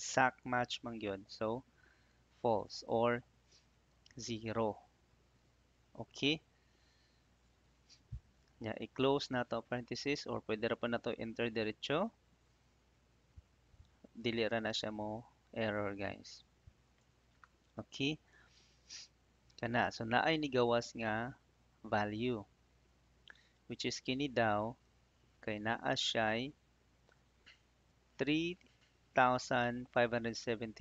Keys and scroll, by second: 4.0 0, 9.3 shift+0, 10.7 BackSpace, 13.1 shift+0, 14.4 Return, 16.1 Up, 16.8 Tab, 25.1 ctrl+c.